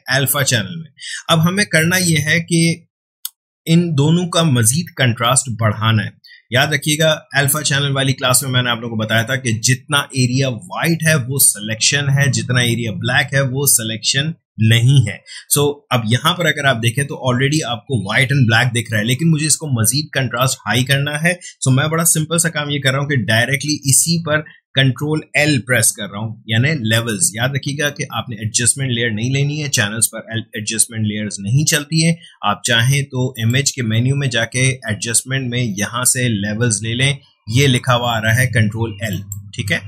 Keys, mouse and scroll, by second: 33.3 click, 39.1-39.8 drag.